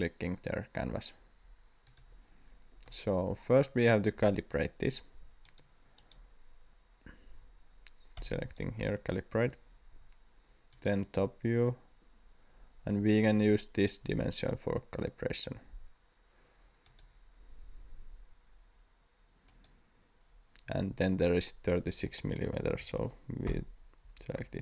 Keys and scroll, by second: 22.2-23.2 typing, 23.5 Return.